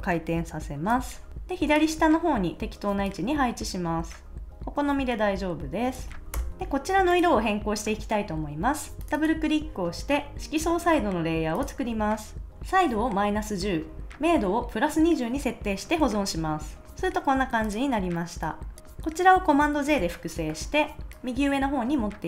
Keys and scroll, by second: 6.3 Return, 6.5 super+s, 16.0 super+s, 19.8 super+j.